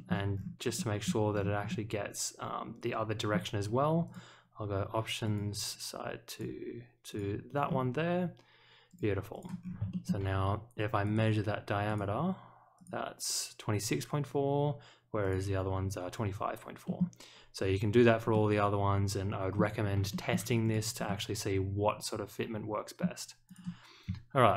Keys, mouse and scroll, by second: 0.3-0.7 scroll down 1, 0.7 middle drag, 1.3 scroll down 1, 1.6-3.3 middle drag, 4.0 click, 5.2 click, 6.3 click, 7.1 click, 7.6 middle click, 8.8 click, 9.3 click, 9.6 scroll up 1, 9.9 shift+middle click, 11.0 click, 11.8 click, 12.7 click, 15.2 click, 16.8 middle click, 18.3-19.5 middle drag, 20.1 shift+middle click, 20.6 click, 21.0-23.0 middle drag, 23.4 click.